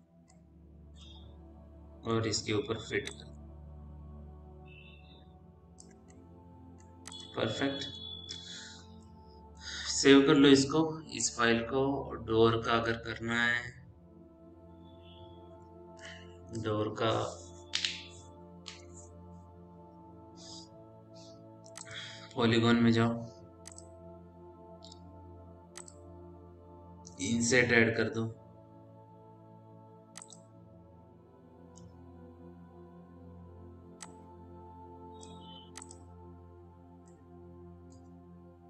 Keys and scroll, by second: 11.1 ctrl+s.